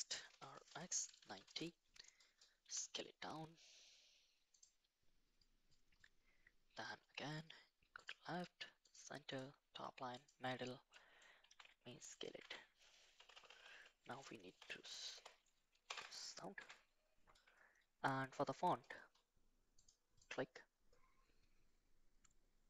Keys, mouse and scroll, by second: 0.3 r, 2.6 s, 8.1 click, 9.3-10.3 drag, 10.9 middle click, 11.5 s, 12.4 Tab, 13.2-15.9 typing, 16.6 Tab, 19.7 click, 20.2 click.